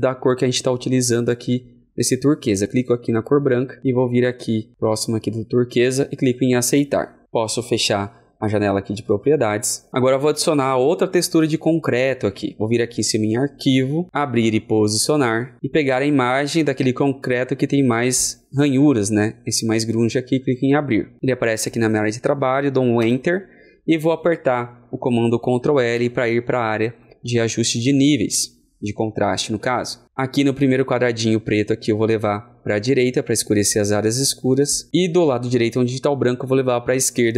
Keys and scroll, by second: 25.7 shift+KP_1, 25.8 ctrl+l.